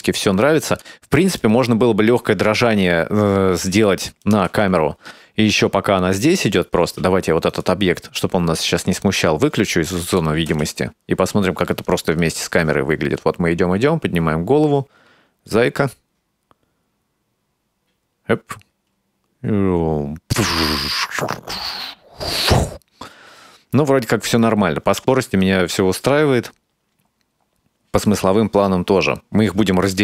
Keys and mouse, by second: 0.7 click, 1.5 click, 2.7 ctrl+middle click, 4.2 click, 4.5 space, 6.8 space, 7.5 right click, 9.0 click, 10.1 click, 10.5 space.